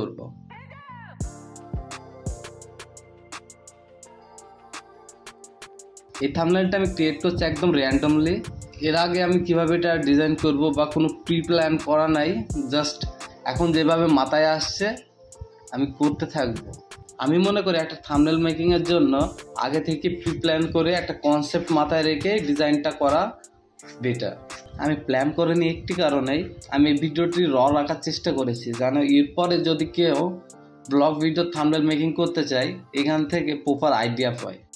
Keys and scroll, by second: 4.1-5.0 typing, 6.5-7.2 typing, 10.2 ctrl+z, 10.7 v, 13.1 typing, 14.8-16.6 typing, 18.6 typing, 22.4 Return, 23.6 ctrl+b, 26.4 Return, 30.0-33.4 typing, 33.8 Return.